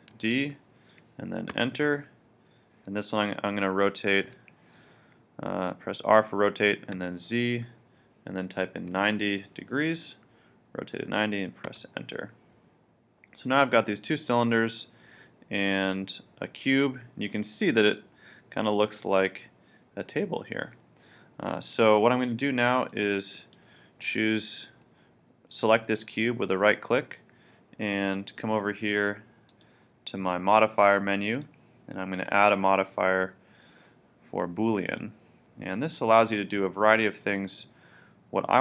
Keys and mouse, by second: 0.1 shift+d, 4.3 r, 13.5-15.4 middle drag, 22.9-24.6 drag, 24.7-26.6 right drag, 29.5-33.2 drag, 38.5-38.6 drag.